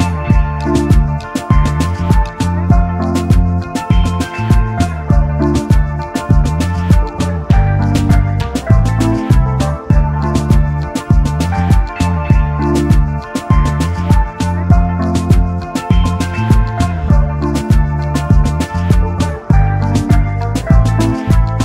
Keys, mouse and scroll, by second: 1.6 space, 1.7 double click, 2.5 double click, 3.0 alt+scroll up 1, 7.3-7.6 alt+scroll down 1, 8.8 alt+shift+click, 12.6-12.9 alt+scroll up 1, 13.5-14.5 scroll up 1, 14.9 ctrl+3, 15.2 ctrl+a, 15.9 Delete, 16.6 ctrl+alt+3, 17.5 |, 17.6 double click, 17.9 space.